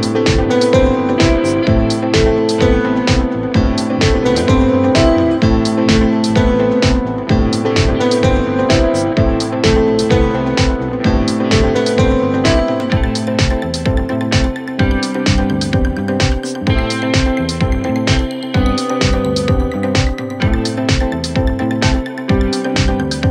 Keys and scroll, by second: 0.4 Delete, 2.0 shift+F2, 2.4 Escape.